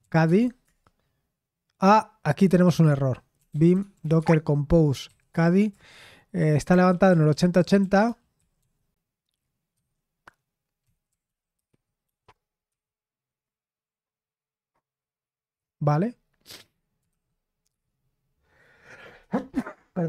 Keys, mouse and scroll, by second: 0.0-0.6 typing, 3.2-8.5 typing, 9.7 typing, 10.8-12.6 typing, 16.5 Escape, 17.0 shift+;, 17.6 Return.